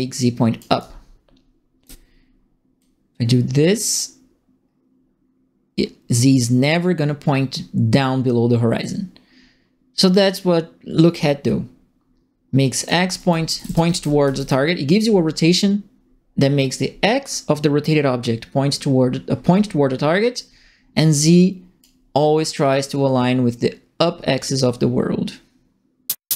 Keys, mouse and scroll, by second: 0.7-1.8 right drag, 0.7 d, 2.7-10.1 drag, 11.2 click, 11.9 right click, 13.0-14.7 typing, 13.1-14.4 right drag, 20.9 click, 22.7-25.7 drag, 25.7 right click, 26.0 click, 26.0 right click, 26.0 click, 26.2 right click.